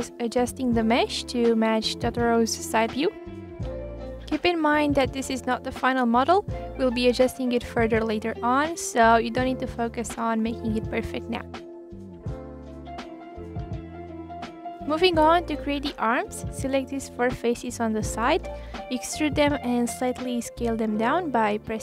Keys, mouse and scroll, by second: 1.7 click, 1.9 g, 2.8 click, 3.0 g, 4.0 click, 4.1 click, 5.2 click, 5.3 click, 5.9 click, 6.0 click, 6.5 click, 6.6 click, 8.3 click, 9.4 click, 10.1 click, 10.2 click, 10.3 click, 11.2 click, 11.3 click, 12.1 click, 13.3 ctrl+z, 13.4 click, 13.7 click, 14.1 click, 14.2 click, 15.4 click, 15.9 scroll down 1, 16.2 click, 17.2 click, 17.6 scroll down 1, 17.8 scroll up 1, 18.0 click, 18.4 scroll up 2, 18.6-19.9 middle drag, 19.9 KP_1, 20.1-20.6 scroll down 1, 20.6 e.